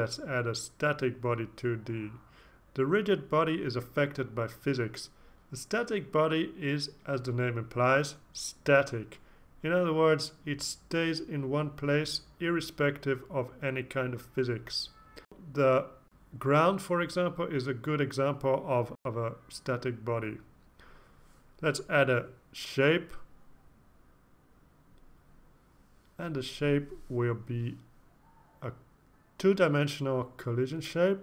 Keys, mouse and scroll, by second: 0.0-0.1 typing, 3.4 click, 7.3 click, 9.5-11.6 drag, 12.2 click, 15.0-18.5 typing, 22.7 click, 23.8-25.1 typing, 26.3 Up, 26.5 Up, 28.1 Return.